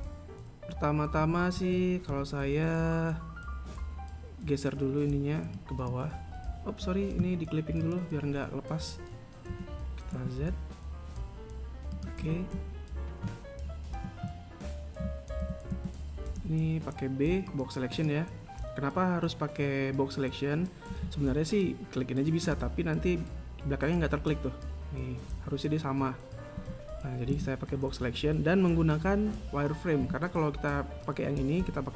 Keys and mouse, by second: 0.5 KP_1, 2.1 a, 2.4 a, 2.9 b, 8.6 click, 10.3 g, 13.0 a, 16.3 a, 16.5 a, 17.2 b, 21.7 a, 23.2 right click, 27.4 KP_1, 28.1 a, 30.9 z.